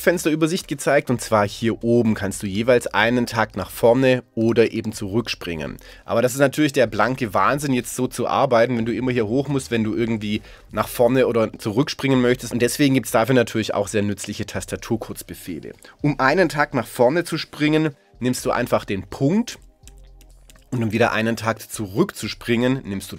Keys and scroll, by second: 19.5 •.